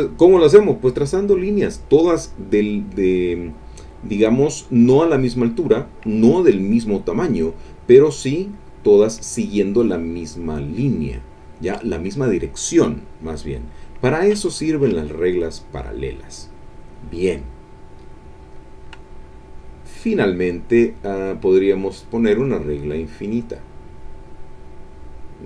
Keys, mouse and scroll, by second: 18.4 click, 19.6 click, 21.5 click, 23.0-24.4 drag.